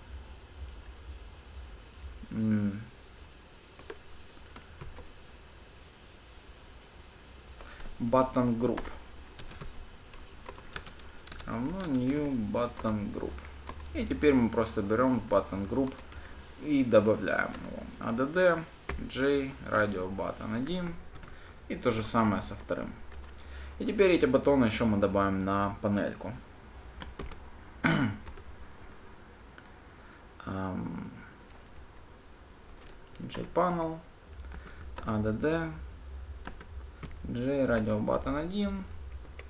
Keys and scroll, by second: 9.1 Return, 20.1 Return, 21.4 ctrl+d, 33.6 Return.